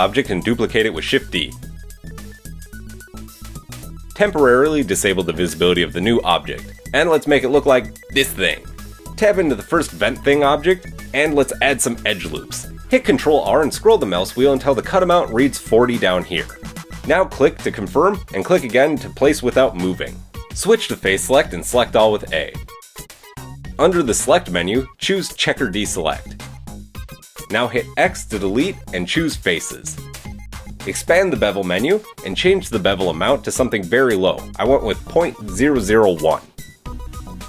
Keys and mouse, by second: 0.3 shift+d, 1.9 click, 3.4 BackSpace, 9.0 click, 9.3 Tab, 12.6 ctrl+r, 19.0-26.8 drag, 22.4 a, 27.4 x, 30.1 Tab, 30.1 click, 30.1 middle click, 30.1 right click, 30.3 Tab, 30.3 a, 32.6 Tab, 33.3 shift+click, 33.8 click, 33.8 right click, 34.2 click, 36.0-37.4 drag, 36.0 0.